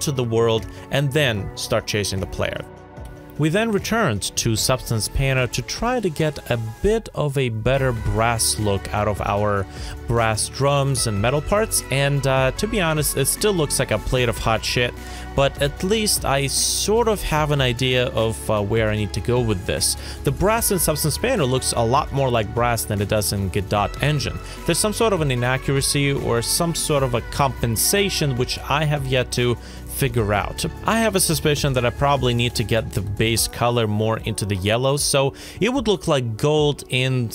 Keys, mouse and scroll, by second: 12.6 scroll up 1, 14.0 shift+right click, 21.3 Right, 21.6 BackSpace, 21.9 2, 22.3 Return, 26.8 shift+right click.